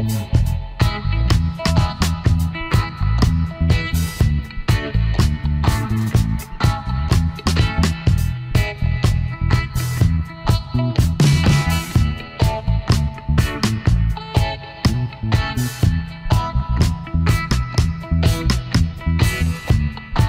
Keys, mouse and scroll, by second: 0.2 space, 1.3 space, 1.9 alt+scroll up 1, 6.2 alt+shift+click, 7.1 space, 9.8 Delete, 12.5 space, 13.5 Delete.